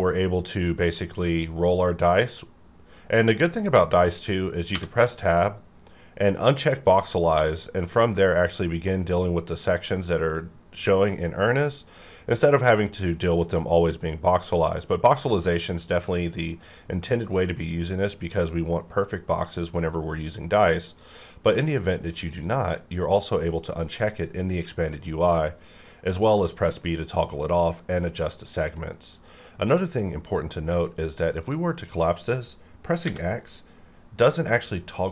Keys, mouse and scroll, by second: 2.3-3.0 scroll down 1, 3.0-4.7 scroll up 1, 4.7 Tab, 6.7 click, 7.6-8.6 scroll down 1, 8.6-8.9 scroll up 1, 8.9-9.8 scroll down 1, 9.8-10.2 scroll up 1, 10.2-11.3 scroll down 1, 11.3-13.7 scroll down 1, 13.7 click, 15.1 scroll up 1, 15.7 scroll down 1, 16.2-16.9 scroll down 1, 16.9-17.5 scroll down 1, 17.5-19.8 scroll up 1, 20.9 click, 24.9-25.5 scroll down 1, 27.2-27.5 scroll up 1, 27.5-28.0 scroll down 1, 28.0-28.5 scroll up 1, 28.5-29.0 scroll down 1, 29.0-31.0 scroll up 1, 31.4 click, 33.0 x.